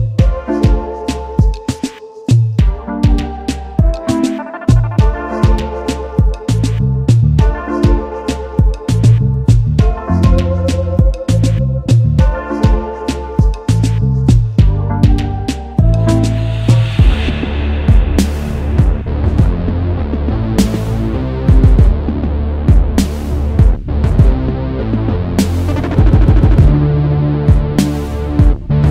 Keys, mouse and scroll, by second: 0.6 space, 0.7 double click, 1.0 space, 2.6-2.9 alt+scroll down 1, 5.9-6.3 alt+scroll up 1, 7.0 space, 8.2 shift+click, 11.1 shift+click, 13.4-13.7 alt+scroll down 1, 14.6-15.4 alt+scroll down 1, 15.6 right click, 20.0 shift+click, 22.8-23.3 alt+scroll up 1, 23.3 alt+scroll down 1, 25.4 alt+scroll down 1, 25.7 alt+scroll up 1, 25.9-26.4 alt+scroll down 1, 26.4 alt+scroll up 1, 27.3 space, 27.4 double click.